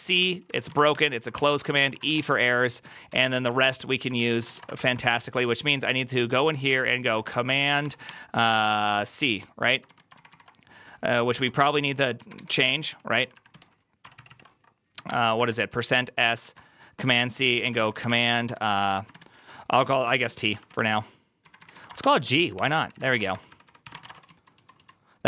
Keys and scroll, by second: 0.0-2.4 typing, 1.2 ctrl+n, 1.5 ctrl+c, 2.7 ctrl+u, 2.9 ctrl+u, 3.6 ctrl+u, 4.0 ctrl+c, 4.1-4.9 typing, 5.5 ctrl+u, 6.3-25.2 typing, 13.9 ctrl+c, 14.0 ctrl+c, 21.3 Left, 24.4 ctrl+u, 24.7 ctrl+u.